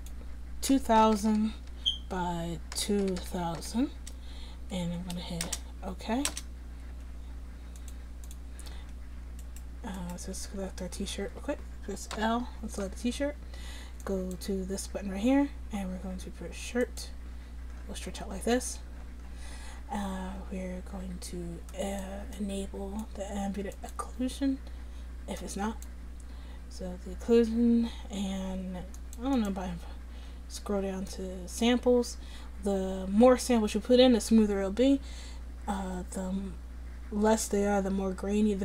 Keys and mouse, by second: 1.2 0, 1.3 0, 3.2 0, 8.3-9.4 drag, 9.4 middle click, 10.0 click, 10.4 Tab, 11.3 a, 12.2 l, 16.4 middle click, 21.8-36.3 drag.